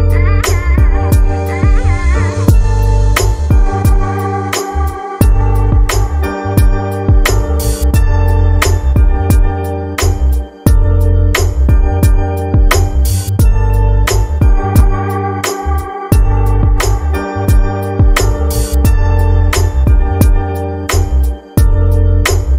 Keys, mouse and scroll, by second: 3.1 click, 8.2-9.2 scroll down 4, 10.1-10.5 scroll up 3, 13.3-14.7 shift+middle drag, 14.7-17.0 scroll down 1, 17.0 shift+middle click, 17.3 click, 21.3-22.5 drag.